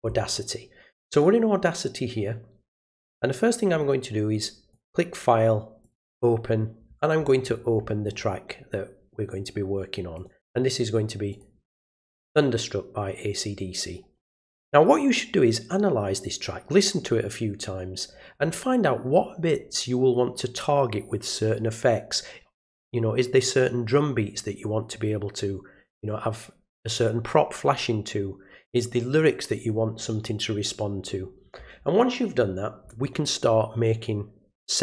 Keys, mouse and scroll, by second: 4.7 click, 5.8 click, 7.1-7.5 scroll down 2, 7.5 scroll up 1, 7.7 scroll down 1, 8.0 middle click, 10.1 click, 11.3 click.